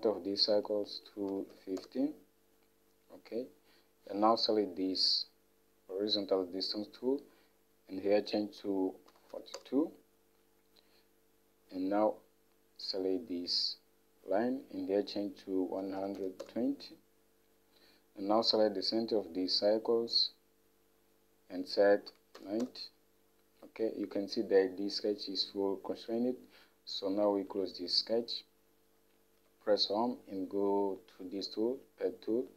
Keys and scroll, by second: 1.3-2.0 typing, 7.3-8.0 typing, 9.1-10.0 typing, 11.2-11.9 typing, 15.7-16.8 typing, 22.1-22.8 typing, 29.6 Home.